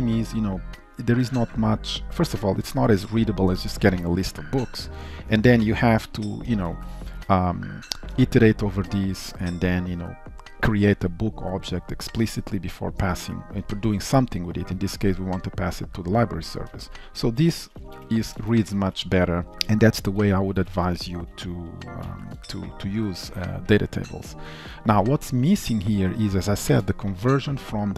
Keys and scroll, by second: 6.8 ctrl+shift+Left, 18.3 ctrl+s, 21.3 ctrl+y, 22.1 ctrl+s, 25.8 ctrl+shift+Right.